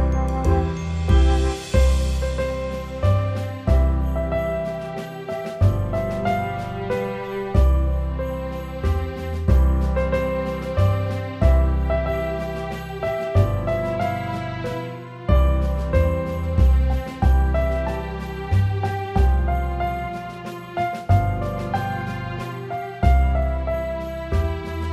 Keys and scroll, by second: 2.8 F9, 4.5 ctrl+0, 14.6-15.8 typing, 18.7 shift+2, 19.1 5, 19.2 Return, 21.9-22.8 typing, 24.7 Up.